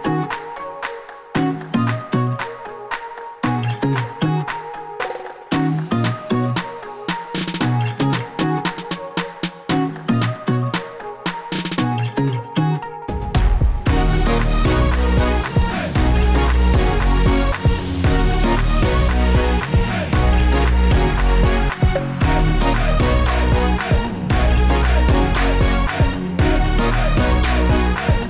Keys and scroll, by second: 1.8-2.7 typing, 3.8 typing, 4.1 Return, 5.4 typing, 17.6 super+d, 18.7-28.2 typing, 20.0 super+d.